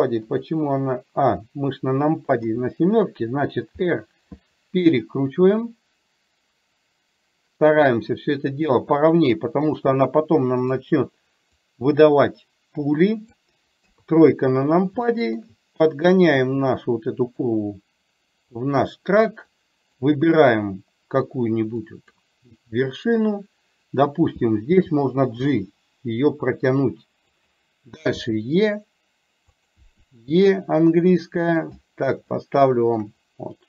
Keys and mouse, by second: 0.4 click, 2.5 a, 11.7-13.5 drag, 14.0 KP_3, 15.2 shift+middle click, 16.3-17.6 drag, 19.7 click, 22.1 click, 32.3 shift+middle click.